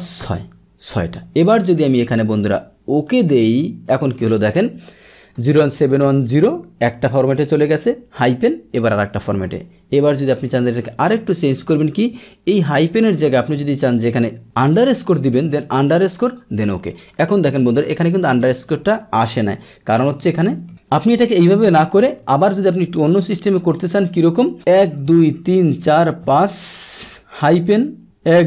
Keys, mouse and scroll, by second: 5.2 click, 10.3 click, 10.8 ctrl+1, 12.5 click, 13.5 BackSpace, 16.2 click, 20.1 click, 20.4 ctrl+1, 21.9 ctrl+1, 23.3 click.